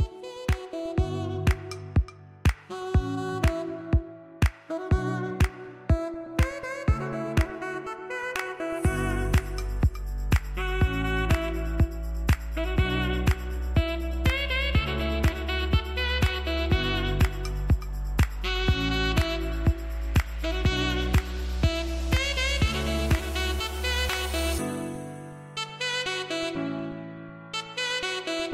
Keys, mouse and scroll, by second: 1.3 ctrl+j, 2.5-7.7 drag, 7.7 ctrl+z, 8.4-17.6 drag, 18.8 scroll down 1, 22.4 scroll down 1, 23.4-26.7 typing, 23.8 scroll up 2, 24.5 click, 25.8 click, 26.4 click, 26.9-28.5 drag.